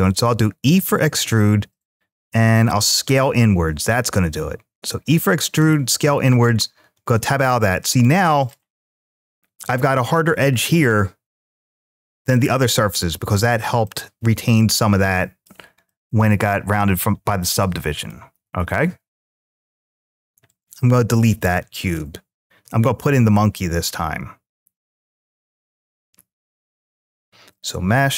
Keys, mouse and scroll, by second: 0.4 e, 2.3 s, 6.1 click, 6.7 Tab, 7.2-7.8 middle drag, 8.2 click, 10.4-12.8 middle drag, 13.6-15.3 middle drag, 15.4 scroll up 1, 15.6-16.9 middle drag, 17.4-17.9 middle drag, 20.2 click, 21.1 x, 22.7 shift+a.